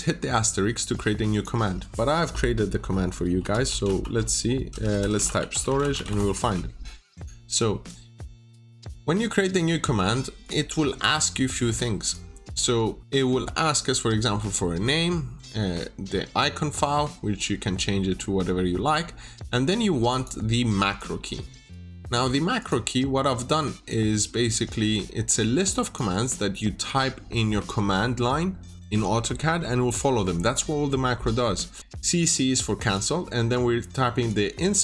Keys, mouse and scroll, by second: 1.2 click, 3.1-6.5 typing, 7.1 click.